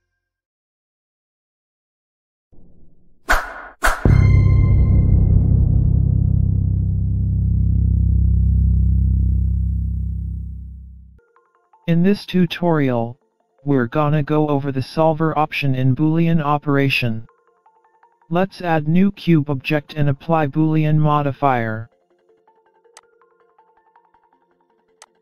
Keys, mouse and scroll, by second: 0.0-0.6 scroll down 1, 0.6 scroll down 1, 24.6 shift+a.